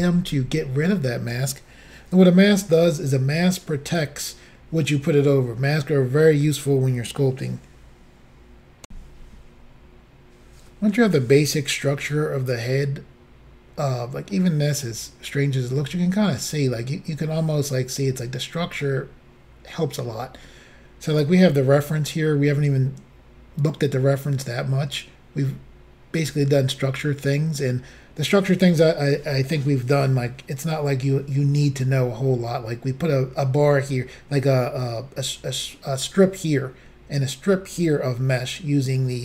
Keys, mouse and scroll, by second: 8.9 Insert, 14.4 middle click, 21.2 click, 21.9-22.5 scroll down 2, 22.5 scroll down 1, 26.6-27.1 scroll up 3.